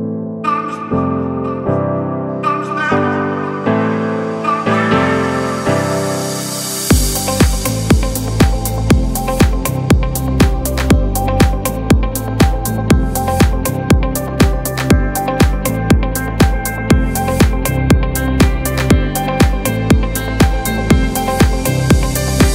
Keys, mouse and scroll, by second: 0.4-7.6 drag, 7.6 alt+scroll down 1, 8.4 click, 8.9-21.3 alt+drag, 8.9 typing.